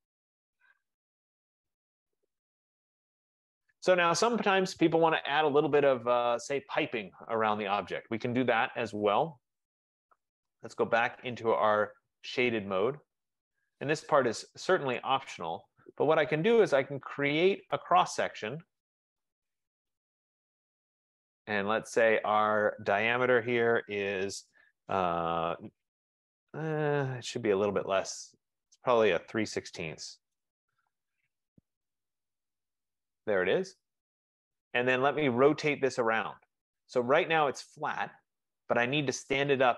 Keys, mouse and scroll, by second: 4.1 right click, 10.4 click, 12.9 click, 15.1 right click, 18.1 click, 20.1 click, 23.6-24.2 typing, 25.2-25.7 typing, 28.4-31.8 typing, 33.8-34.3 scroll, 35.0 click, 36.4 click, 37.6 middle click.